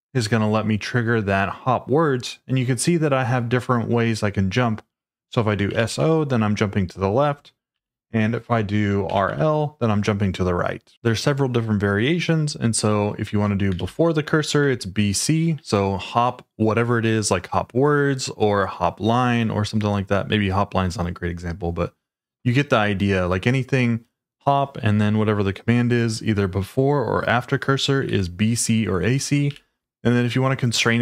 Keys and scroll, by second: 5.4-6.4 typing, 7.7 shift+s, 8.8-9.7 typing, 13.2 j, 13.7 shift+v, 14.6 Escape, 27.9-29.5 typing.